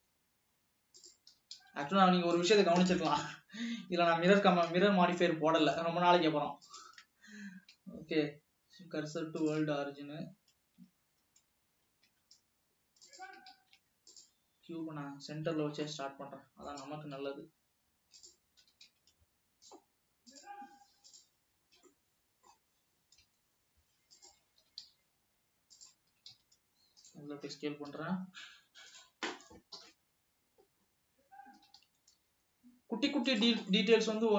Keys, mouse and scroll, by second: 0.2 s, 1.5 g, 3.1 KP_7, 4.5 g, 7.9 shift+s, 12.1 x, 13.7 shift+a, 15.7 scroll down 2, 16.1-17.1 middle drag, 17.1 s, 18.8 g, 21.7 g, 22.1 scroll up 2, 22.2 middle click, 22.9 scroll down 2, 23.6 s, 24.9 g, 26.2 s, 27.6 s, 29.9 KP_7, 31.2 scroll up 1, 32.0 g, 33.9-34.3 middle drag.